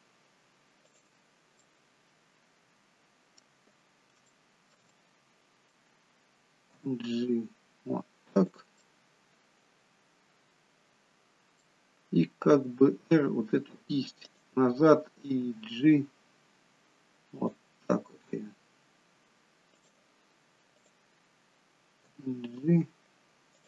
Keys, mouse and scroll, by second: 0.7 click, 1.6 middle click, 4.3 shift+middle click, 4.9 middle click, 6.8 g, 8.7 middle click, 12.4 r, 15.4 g, 18.1 r, 20.7 click, 22.0 g.